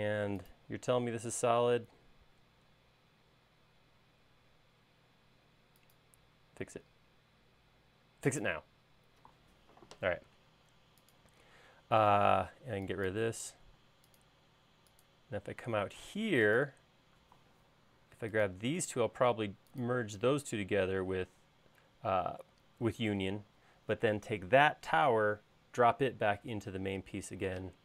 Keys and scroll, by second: 12.7 e, 14.0 space.